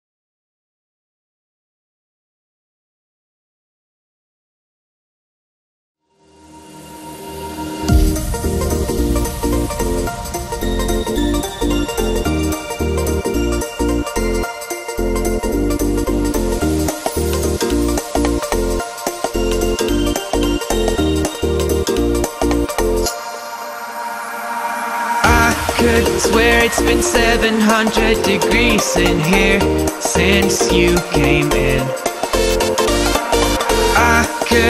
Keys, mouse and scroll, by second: 2.2 Down, 5.4 Down, 6.1 click, 6.4-6.9 space, 7.2 click, 8.0-10.7 alt+drag, 11.1 Right, 12.1 Down, 12.7 Right, 13.3 Down, 14.1 Right, 14.6 Up, 16.7 click, 17.1 Left, 17.7 ctrl+-, 18.2 space, 18.3 click, 18.5 space, 19.1 ctrl+=, 20.3 click, 21.5 shift+click, 23.3 click, 26.3 ctrl+=, 27.8 space, 27.9 click, 28.1-29.3 space, 31.4 F9, 32.4 space, 32.6 click, 33.2 space, 33.8 click.